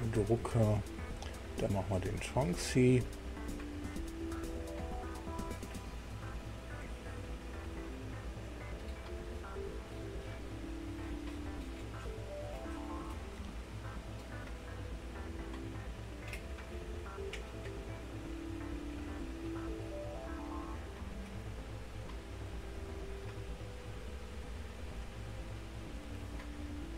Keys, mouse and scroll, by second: 0.0 click, 1.4 click, 2.5 click, 3.7 click, 14.1 click, 16.3 click, 19.2 click, 19.9-20.6 scroll down 1, 20.7 scroll up 1, 22.5 click, 25.0 click, 25.8 click.